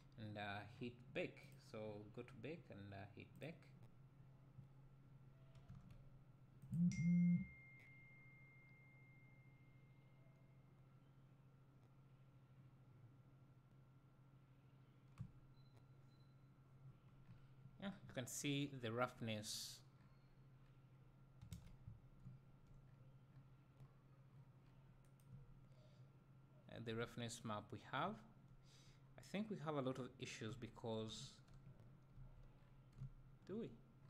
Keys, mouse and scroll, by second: 5.9 Tab, 6.8 click, 22.3 `, 31.3 Tab, 32.2 a.